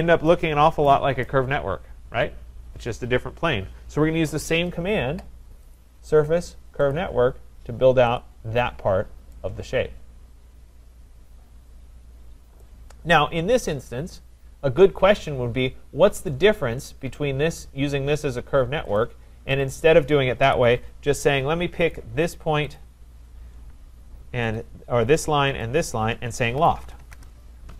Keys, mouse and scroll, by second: 0.3-0.9 scroll, 0.9 right click, 5.7 click, 6.9 click, 8.2 click, 8.6-9.3 scroll up 2, 9.3-9.7 scroll up 2, 11.4 middle click, 12.6 right click, 19.0 click, 19.6 click, 20.5 Delete, 21.9 click, 22.8 click, 24.6 shift+click, 24.7 shift+click, 25.7 click, 26.5-27.5 typing.